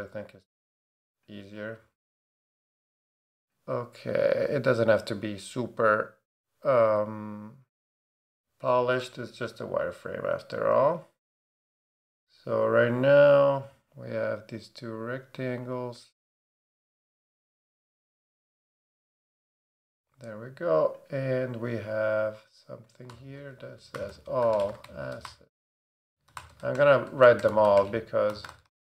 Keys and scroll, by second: 23.1 Return, 23.7-28.9 typing.